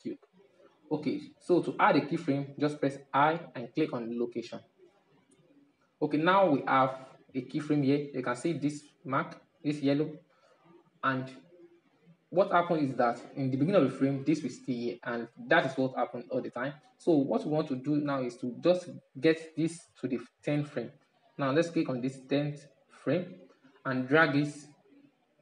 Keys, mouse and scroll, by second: 3.3 i, 11.1-19.2 middle drag, 21.1-21.6 drag, 21.6-24.1 middle drag, 24.1-25.4 drag.